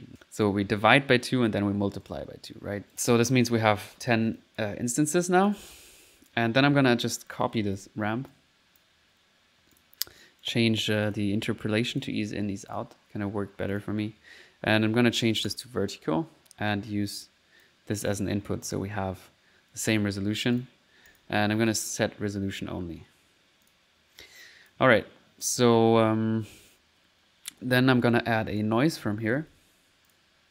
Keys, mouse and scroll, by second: 1.8 scroll down 2, 2.1 middle click, 4.1 click, 4.4 click, 5.0 middle click, 5.3 click, 6.0 click, 7.3 click, 7.6-8.3 typing, 8.3 ctrl+click, 9.8 click, 10.2 right click, 11.1 click, 11.9 click, 12.5 middle click, 12.7 click, 13.7 click, 15.5 click, 16.7-18.0 drag, 18.1 click, 20.6 click, 21.1 click, 21.7 click, 23.7 click, 24.5 click, 25.2 click, 25.6-27.1 middle drag, 26.8-27.6 typing, 28.5 right click, 28.8-30.0 typing, 30.1 click.